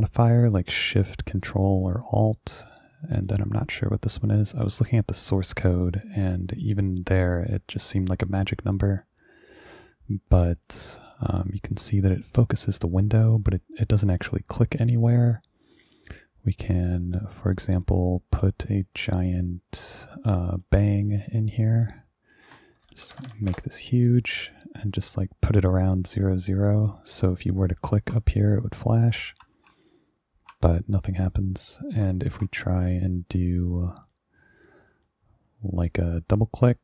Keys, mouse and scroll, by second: 2.4 click, 4.8 click, 7.1 click, 7.8 click, 9.0 click, 10.7 ctrl+click, 14.9 click, 20.7 click, 21.1 click, 21.5 right click, 22.9-23.7 typing, 24.5-26.8 drag, 27.4 ctrl+click, 27.8 ctrl+click, 28.7 click, 29.4 click, 29.9 ctrl+click, 30.8 click, 32.9 click, 34.1 click, 34.7 click, 35.0 click.